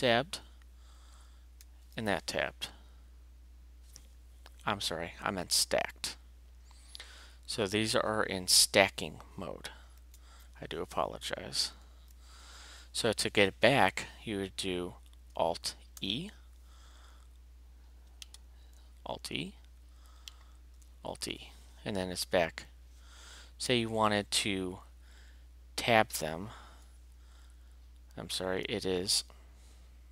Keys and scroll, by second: 1.6 alt+s, 10.1 alt+a, 11.8 alt+a, 16.0 alt+e, 18.7 alt+e, 20.8 alt+e, 28.3 alt+t.